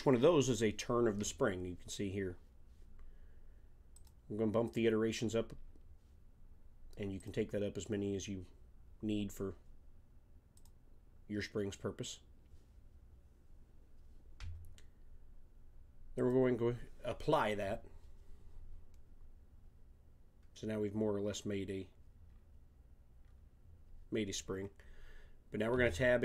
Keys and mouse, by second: 3.9-6.3 drag, 6.3-7.9 middle drag, 7.9-8.9 drag, 8.9-10.2 middle drag, 10.5 click, 16.1-18.1 drag, 21.2-22.3 middle drag, 25.7 Tab.